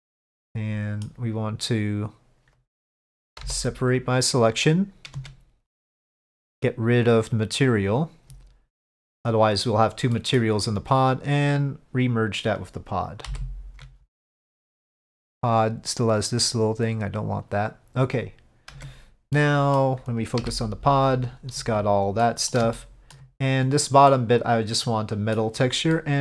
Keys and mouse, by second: 0.6 middle click, 5.2 Tab, 5.8 click, 7.1 click, 9.1 middle drag, 10.2 middle drag, 11.6 ctrl+click, 13.4 ctrl+j, 14.4-14.8 middle drag, 15.6 click, 16.9 click, 18.8 Tab, 19.4 middle click, 20.5 KP_Divide, 22.3 middle click, 22.9 shift+middle click, 24.2-25.5 middle drag, 26.0 middle click.